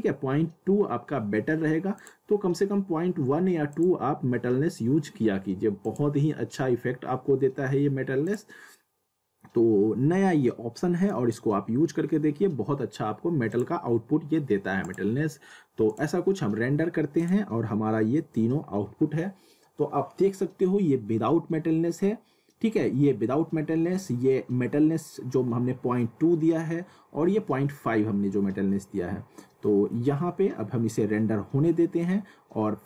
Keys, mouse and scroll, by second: 1.9 click, 8.2 click, 11.1 click, 13.5 click, 29.1 scroll up 1, 29.6 middle click, 30.2 scroll down 1.